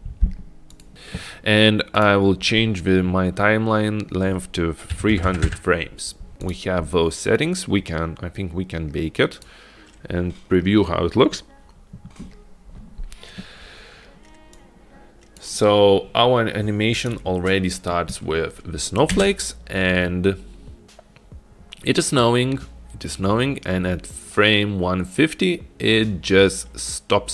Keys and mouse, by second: 2.0-6.3 drag, 5.3 KP_0, 6.5 click, 9.4-13.5 drag, 14.9 click, 17.1 click, 19.3 space.